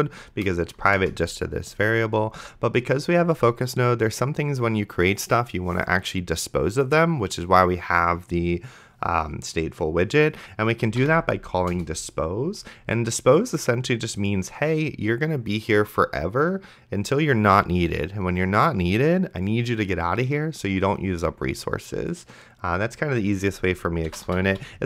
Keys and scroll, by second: 1.0 Return, 10.8-11.5 typing, 11.7 Return, 24.0-24.8 typing.